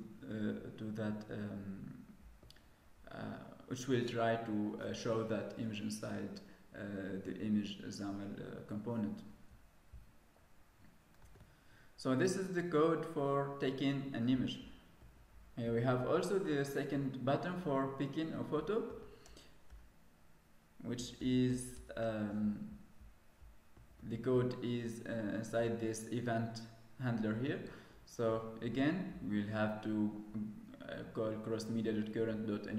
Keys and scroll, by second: 11.1 ctrl+s.